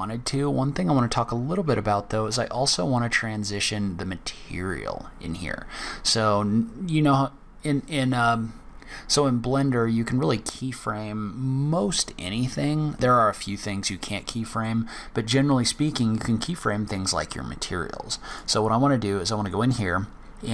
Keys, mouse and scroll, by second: 14.6 click, 18.2 click.